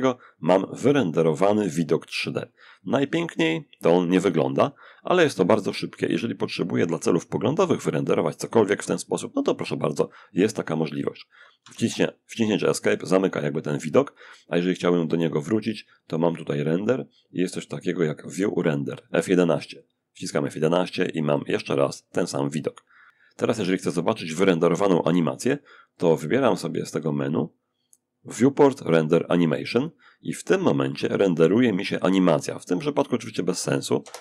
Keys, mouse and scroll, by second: 2.1-2.8 scroll up 1, 2.8-3.6 scroll down 1, 3.6-4.3 scroll up 1, 4.3-5.9 middle drag, 10.8 Escape, 14.8 click, 18.9 click, 20.5-21.9 middle drag, 26.1 click, 28.9 click, 33.2 0.